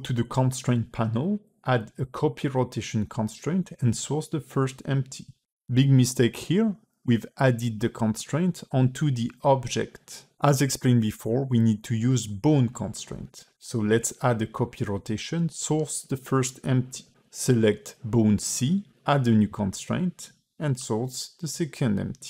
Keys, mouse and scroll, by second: 0.9 click, 3.7 click, 10.6 click, 11.9 click, 12.9 click, 15.2 click, 17.5 click, 18.4 click, 19.3 click.